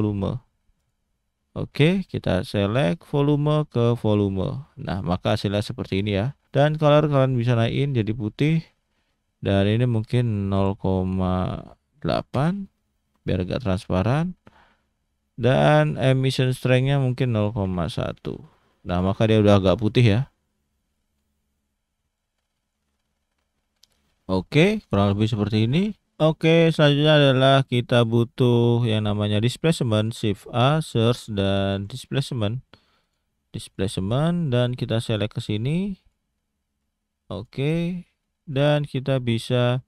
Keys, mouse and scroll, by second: 2.8 click, 6.4 click, 8.4 click, 9.0-9.7 scroll up 2, 9.7 click, 14.4 middle click, 15.4 middle click, 16.2 click, 20.6-20.9 scroll down 1, 20.9 middle click, 22.1 click, 24.0-24.6 scroll down 2, 24.6-24.9 scroll up 1, 25.0 shift+middle click, 34.5 click, 36.8 click, 37.8-38.2 scroll down 2, 38.2 middle click, 38.8 click, 39.6 scroll up 1, 39.7 middle click.